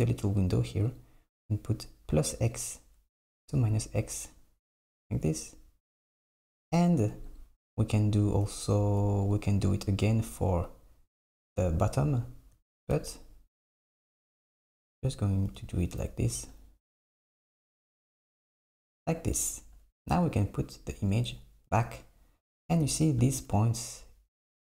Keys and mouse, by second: 7.3-9.4 drag, 10.2 click, 14.2 click, 15.5 j, 16.5 click, 17.7 j, 21.2 click.